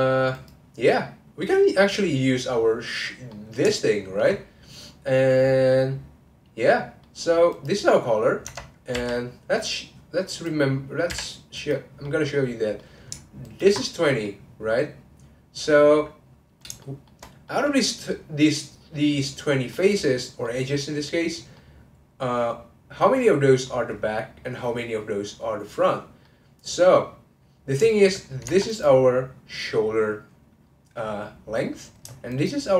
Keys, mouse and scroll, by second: 1.4-4.3 middle drag, 4.3-5.7 scroll up 1, 5.7-7.5 middle drag, 7.5 click, 9.1-10.3 middle drag, 10.3 click, 11.5 click, 12.0-13.4 middle drag, 13.4 ctrl+click, 14.2-24.6 middle drag, 26.2-28.4 middle drag, 28.4 Tab, 28.6 click, 32.3 shift+click.